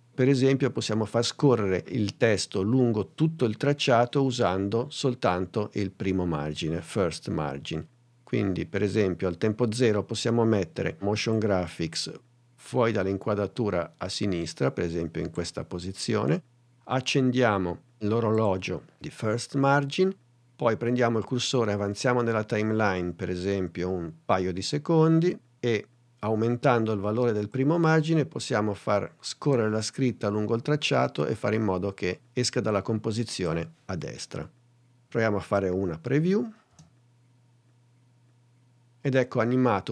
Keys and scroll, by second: 36.1 n, 36.8 space.